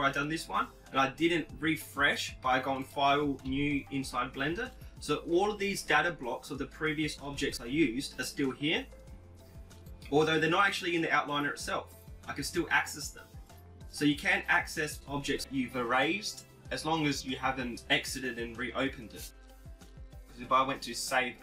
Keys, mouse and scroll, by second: 0.6-2.7 right drag, 1.7-3.6 drag, 11.4-15.7 drag, 20.1 click.